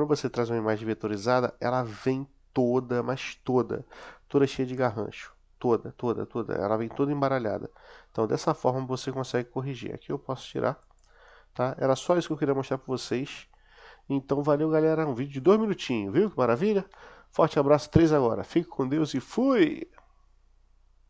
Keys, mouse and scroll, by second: 0.9-1.5 middle drag, 1.7-2.8 middle drag, 3.1-3.8 middle drag, 4.2-4.6 middle drag, 4.8 middle click, 10.7 click, 12.0-13.0 middle drag, 13.3-14.5 middle drag.